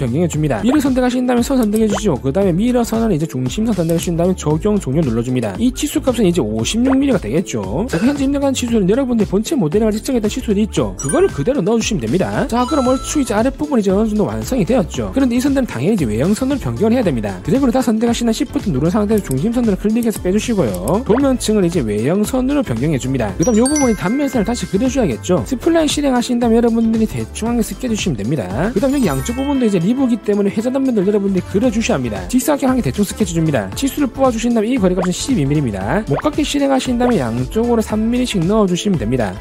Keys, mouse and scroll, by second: 0.4 click, 1.7 w, 2.5 click, 3.2 click, 4.3 click, 4.8 click, 5.2 click, 5.7 click, 6.5 click, 6.9 click, 7.5 5, 12.9 scroll up 1, 13.0 scroll down 1, 13.4-14.2 scroll up 3, 14.2 middle click, 17.6 click, 19.4 shift+click, 20.3 shift+click, 21.0 shift+click, 22.7 click, 23.2 click, 24.3 scroll down 1, 24.7 middle click, 24.8-25.2 scroll up 1, 26.0 click, 26.5 click, 27.1 click, 27.9 click, 29.3 middle click, 30.6 middle click, 30.7 scroll up 1, 32.3 scroll up 1, 33.0 3, 33.3 click, 33.9 click, 34.5 click, 34.9-35.9 typing, 35.0 click, 35.7 click, 36.8 click, 37.5 click, 38.1 click, 38.6 click, 39.3 click.